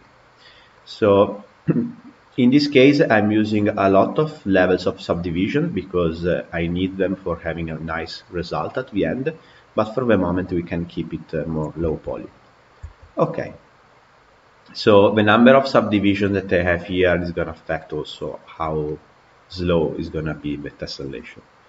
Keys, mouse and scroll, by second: 3.5-4.6 drag, 4.6-6.8 scroll down 2, 7.3-10.2 drag, 11.7-12.8 shift+middle drag, 12.8 Tab, 13.2-16.2 middle drag, 18.7-20.8 middle drag, 20.8 scroll down 2.